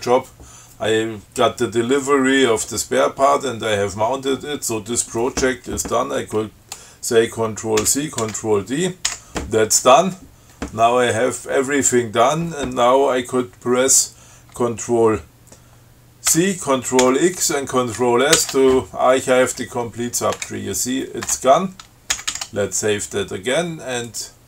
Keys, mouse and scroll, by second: 8.1 ctrl+c, 8.4 ctrl+t, 9.3 d, 16.6 ctrl+c, 17.3 ctrl+x, 18.6 ctrl+s, 20.6 Return, 22.4 ctrl+x, 22.6 ctrl+s, 24.3 click.